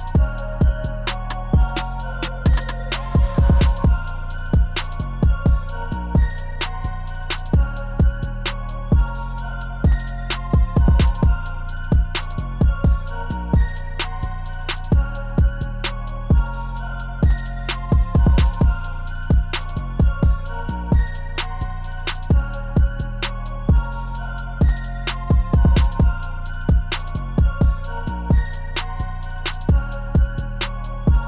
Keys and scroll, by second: 22.6 Page_Up.